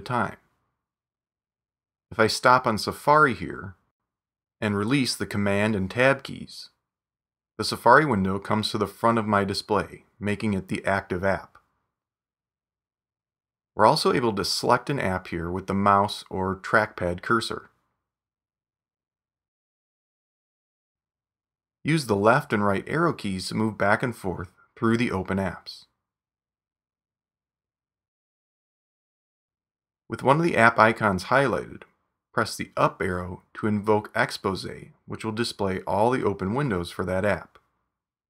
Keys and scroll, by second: 10.9 super+Tab, 22.1 super+Tab, 23.7 super+Right, 25.5 super+Left, 27.4 super+Tab, 30.2 super+Right, 34.1 super+Up, 37.3 super+Right.